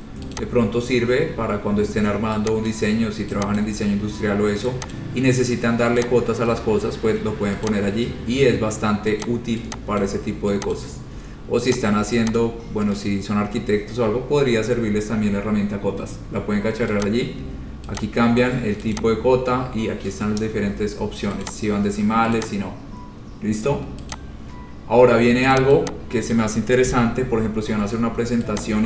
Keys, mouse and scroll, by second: 0.2 click, 0.5 click, 2.9 click, 3.8 click, 4.1-4.7 scroll, 5.2 click, 6.0 scroll down 3, 6.2 click, 7.8 click, 9.0 scroll, 9.4 click, 10.2 click, 11.0 click, 11.9 click, 12.6 click, 17.2 click, 18.2 click, 19.2 click, 21.6 click, 22.5 click, 24.3 click, 25.7 click, 26.5 click, 27.0 Delete.